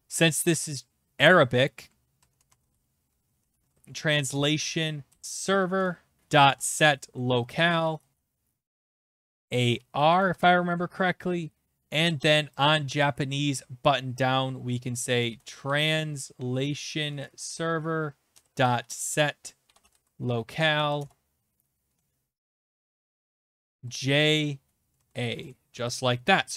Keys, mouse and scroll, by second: 1.9-10.8 typing, 4.3 Return, 11.8 scroll, 12.6 click, 12.8 Return, 15.0-16.7 typing, 16.4-16.9 scroll, 17.2 Down, 17.4 Return, 18.0-25.2 typing, 25.7 ctrl+s.